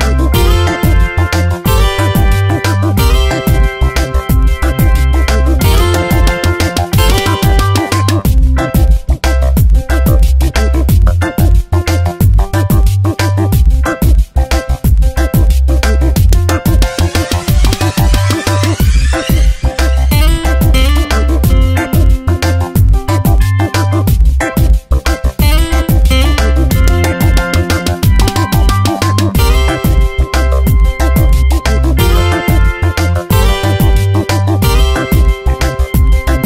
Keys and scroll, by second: 0.3 space, 2.2 space, 3.9 ctrl+z, 4.8 space, 8.8 space, 14.7 ctrl+Return, 15.3 v, 16.8 ctrl+j, 33.1 space, 34.3 ctrl+t, 36.2 Return.